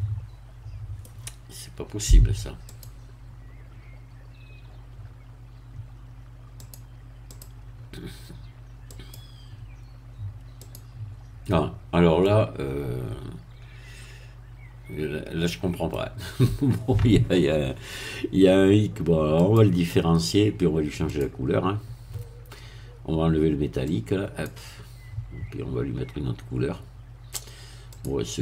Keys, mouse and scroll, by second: 2.7 click, 6.6 click, 7.3 click, 8.9 click, 10.6 click, 12.2-16.1 middle drag, 19.4 click, 21.1 click, 23.9 click, 27.9 click.